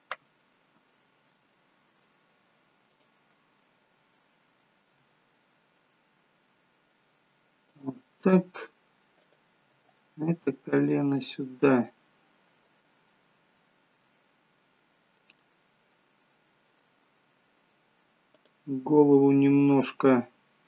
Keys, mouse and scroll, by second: 0.8 scroll up 1, 0.9 shift+middle click, 1.6 middle click, 2.8 click, 5.1 g, 8.3 middle click, 9.3 click, 9.8 g, 11.2 middle click, 13.0-13.8 scroll down 1, 14.0 middle click, 14.0 scroll down 1, 16.1 middle click, 18.3 click.